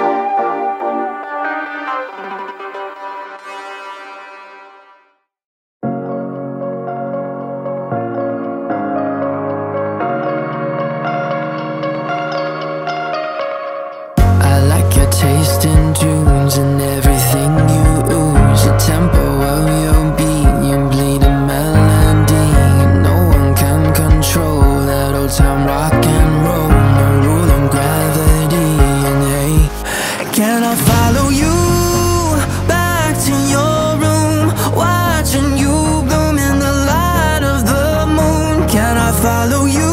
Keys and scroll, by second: 11.8 ctrl+a, 12.9 1.